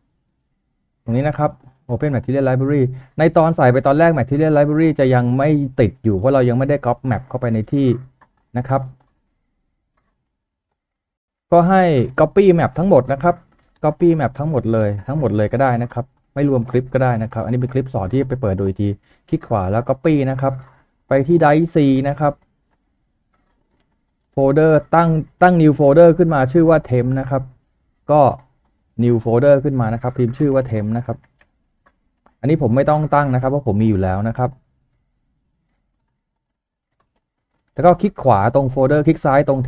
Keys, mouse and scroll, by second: 2.2 double click, 14.6 shift+click, 16.5 ctrl+click, 17.5 ctrl+click, 20.0-20.7 typing, 23.6 double click, 30.0-31.3 typing, 35.5 typing, 35.9 right click.